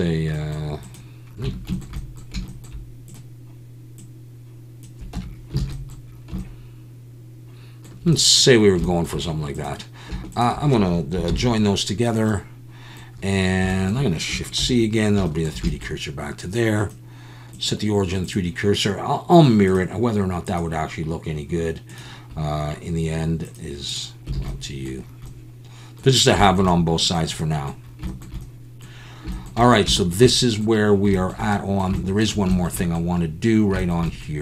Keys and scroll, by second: 1.4 Tab, 5.2 Tab, 5.6 alt+a, 11.3 ctrl+j, 14.6 shift+c, 24.4 alt+a.